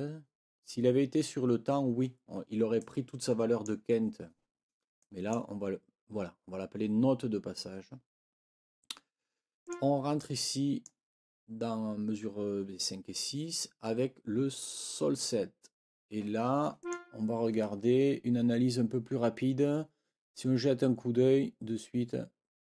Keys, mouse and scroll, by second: 2.8-3.8 drag, 5.0 click, 9.6 click, 10.2 click, 16.8 click.